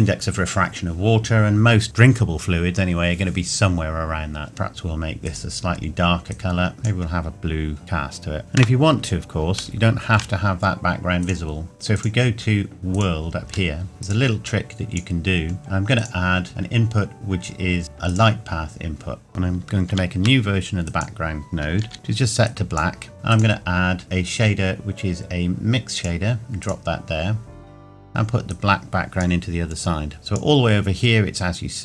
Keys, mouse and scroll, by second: 4.5 click, 8.4 middle click, 9.8 shift+middle click, 11.2 click, 13.7 shift+middle click, 13.9 scroll up 1, 15.6 scroll down 1, 18.1 click, 20.9 click, 21.9 click, 23.1 shift+middle click, 23.3 click, 28.5 click.